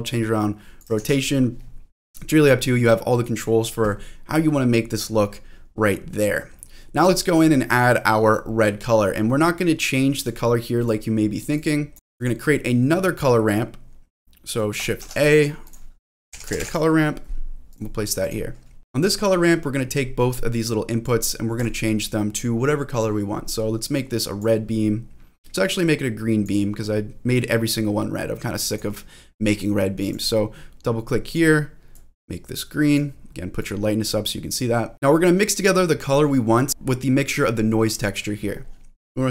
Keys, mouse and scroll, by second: 0.1 click, 1.0 ctrl+z, 1.9-2.6 scroll down 2, 4.2-5.0 scroll up 4, 5.0-6.6 scroll down 6, 6.6 middle click, 6.6 scroll down 1, 7.0 click, 7.3 middle click, 7.7-8.3 scroll up 2, 8.1 middle click, 8.8-10.0 scroll down 1, 10.1 click, 10.8 click, 11.9 middle click, 11.9 scroll down 1, 12.1 click, 12.4 middle click, 15.0 shift+a, 18.6 scroll up 1, 18.8 click, 20.6 click, 21.5 click, 28.7 click, 30.0 click, 30.2 click, 31.2 click, 34.9 middle click, 34.9 scroll down 3, 35.1-36.2 drag, 36.7 shift+middle click, 38.7-39.3 scroll down 2, 38.9 ctrl+z, 38.9-39.3 scroll up 4.